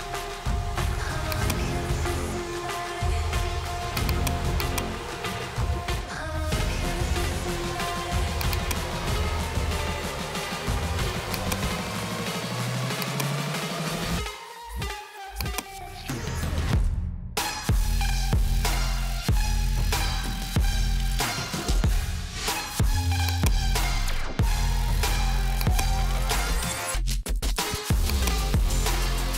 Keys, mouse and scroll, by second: 4.1 click, 4.2 click, 4.8 click, 5.7-7.2 typing, 8.5 click, 8.6 click, 11.5 click, 11.8-13.2 typing, 13.1 click, 15.5 click, 16.3-18.0 typing, 19.1 Tab, 19.4-23.6 typing, 23.3 click, 24.5 click, 25.7 click, 26.4-29.0 typing, 28.2 click.